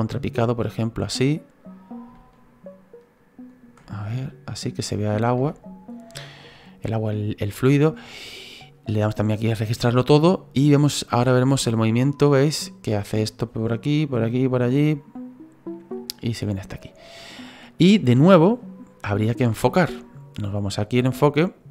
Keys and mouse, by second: 2.1 ctrl+middle click, 3.8 middle click, 4.5 middle click, 5.5 shift+middle click, 9.0 click, 10.6 click, 21.2 click.